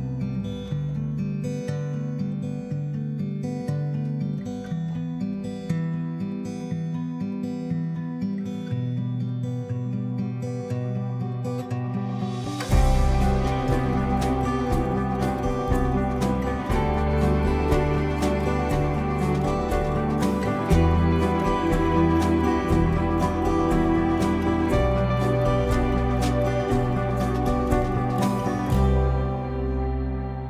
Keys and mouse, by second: 0.3-2.6 drag, 3.5 middle click, 8.4-9.6 drag, 10.5 click, 11.5 Tab, 11.7 middle click, 13.3 shift+middle click, 14.0 a, 15.7 Tab, 16.0 a, 16.6 m, 21.2 middle click, 22.5 Tab, 22.7 middle click, 23.2 shift+middle click, 24.0-25.0 drag, 25.4 shift+middle click, 25.8 middle click, 26.3 middle click, 27.2 shift+middle click, 29.0 middle click.